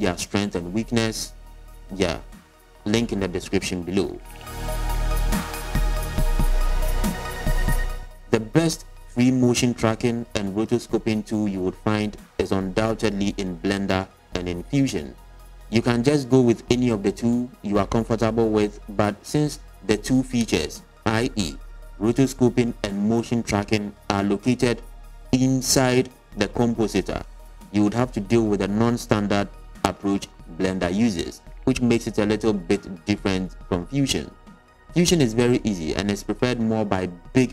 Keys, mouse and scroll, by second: 27.4-28.4 scroll down 1, 28.6 shift+a, 35.1 middle click, 35.7 middle click, 37.3-37.5 scroll down 3.